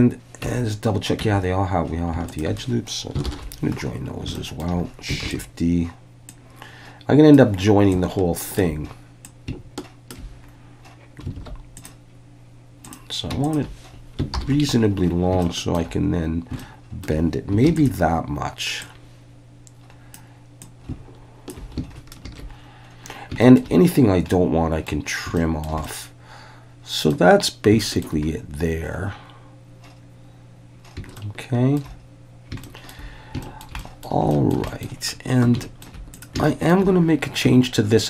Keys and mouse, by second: 0.4 Tab, 1.2 Tab, 3.3 ctrl+j, 4.3-4.6 shift+middle drag, 5.2 shift+d, 6.3-7.3 drag, 7.9-8.6 ctrl+drag, 9.3 ctrl+click, 11.4 alt+a, 11.8-12.1 drag, 12.9-13.3 drag, 14.3 ctrl+j, 15.4-15.8 shift+middle drag, 16.6-17.0 shift+middle drag, 17.7 shift+d, 17.7 click, 18.9-20.1 drag, 20.6 ctrl+click, 22.2 alt+a, 23.4 shift+middle click, 24.3-24.9 middle drag, 25.4-25.7 shift+middle drag, 25.8-27.1 middle drag, 27.8 shift+middle click, 31.2 shift+middle click, 32.6 shift+middle click, 33.4 shift+middle click, 33.8 middle click, 33.9 click, 34.3 shift+middle drag, 34.7 middle click, 35.6 shift+middle click, 36.2 drag, 36.4 shift+middle drag.